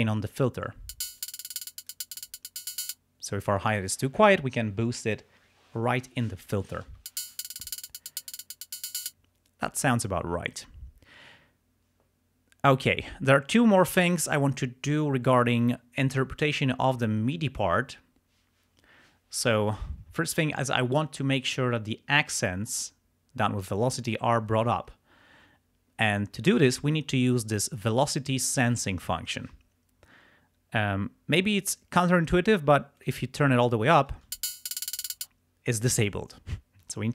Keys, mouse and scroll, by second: 0.8 space, 1.3 click, 2.9 space, 7.0 space, 9.0 space, 19.7 click, 33.0 click, 34.2 space, 35.2 space, 36.8-37.1 drag.